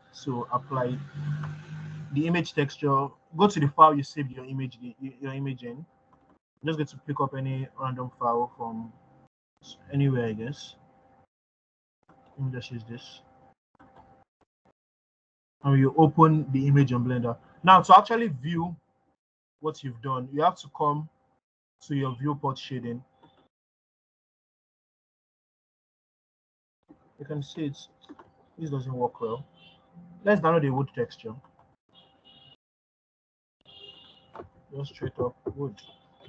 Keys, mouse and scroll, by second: 19.9-20.3 scroll up 1, 25.5-29.0 drag, 29.0 scroll down 2.